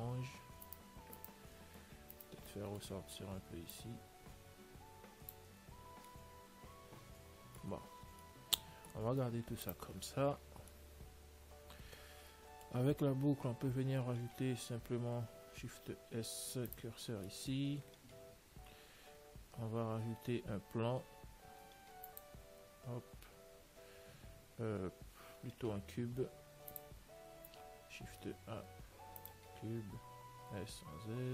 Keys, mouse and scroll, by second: 1.0-4.3 right drag, 2.8-4.6 middle drag, 4.0 click, 5.9 Tab, 6.6-9.5 middle drag, 9.7 ctrl+s, 10.6 middle click, 12.7 middle click, 13.3 Tab, 16.1 shift+s, 18.9 Tab, 19.7 a, 21.4 shift+a, 25.6 x, 28.4 shift+a, 30.7 s.